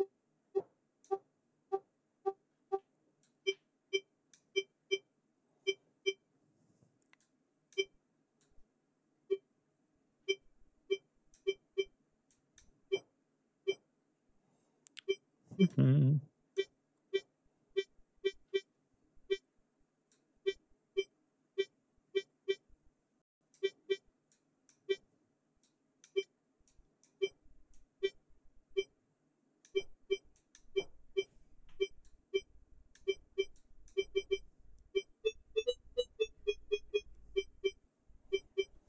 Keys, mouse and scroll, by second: 2.9-4.2 drag, 6.9-7.6 drag, 8.1-11.2 drag, 12.0-12.4 drag, 15.4-16.4 drag, 19.8-23.3 drag, 23.9-24.4 drag, 25.2-25.8 drag, 26.2-26.8 drag, 27.3-29.4 drag, 29.9-30.3 drag, 31.6-32.7 drag, 33.1-33.6 drag.